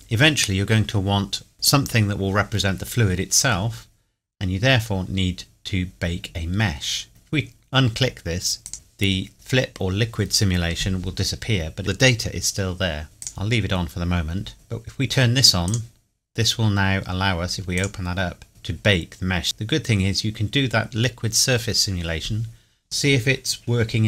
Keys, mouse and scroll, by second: 3.7-4.8 scroll down 1, 4.8 scroll up 1, 5.6 scroll down 1, 8.6 click, 13.2 click, 15.7 click, 18.4 scroll down 1, 19.4 scroll up 1.